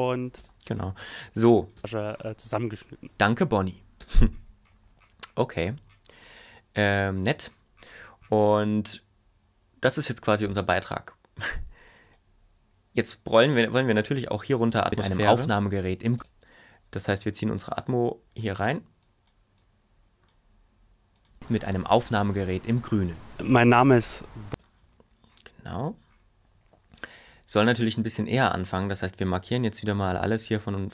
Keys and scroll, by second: 0.3 space, 1.7 space, 4.0 space, 14.8 space, 16.1 space, 21.3 space, 24.5 space.